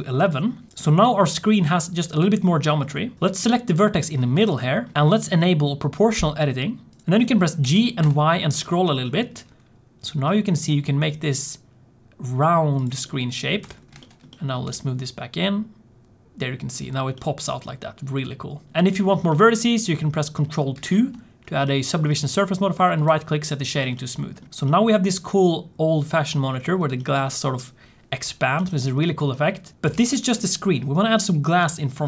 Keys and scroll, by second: 2.8 1, 13.5 Tab, 14.6 g, 20.7 ctrl+2, 29.8 alt+z, 29.8 alt+z.